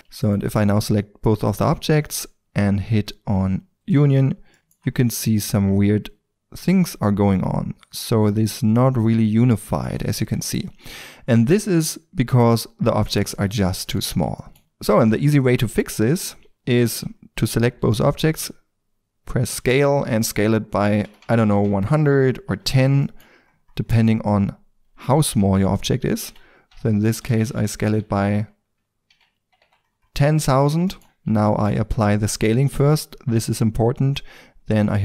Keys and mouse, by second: 3.7 click, 4.5-5.4 middle drag, 5.4 Tab, 10.1 Tab, 13.1-14.9 drag, 15.6 ctrl+z, 16.0 ctrl+z, 19.5 s, 21.9 click, 22.1-23.1 middle drag, 23.1-25.2 drag, 25.2-28.5 middle drag, 25.3 ctrl+z, 26.3 s, 29.9 middle click, 30.0 click, 31.0 ctrl+z, 31.0 click, 31.5 ctrl+a, 34.9-35.0 drag.